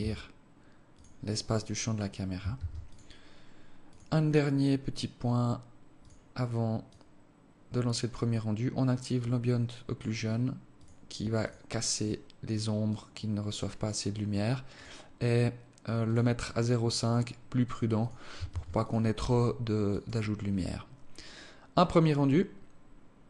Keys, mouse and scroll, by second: 2.3 ctrl+s, 3.5 click, 4.5-5.0 scroll down 3, 5.6 click, 6.6 click, 10.4 click, 11.0 click, 11.6 click, 12.6 click, 14.4 click, 15.7 click, 16.7 click, 17.6 click, 18.1 ctrl+s, 19.5 click.